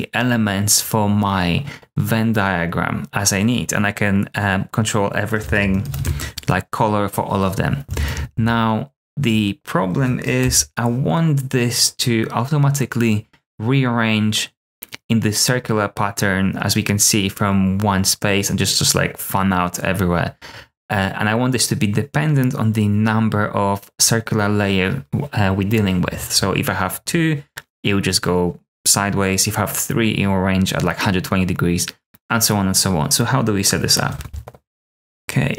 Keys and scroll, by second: 5.4-6.4 typing, 7.8 super+a, 8.0 s, 8.1 s, 8.3 s, 11.1 BackSpace.